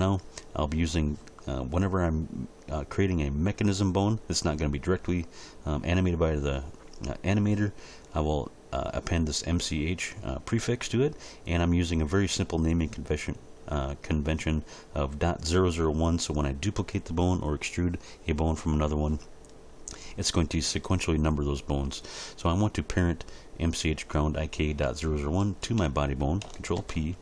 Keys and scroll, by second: 26.8 ctrl+p.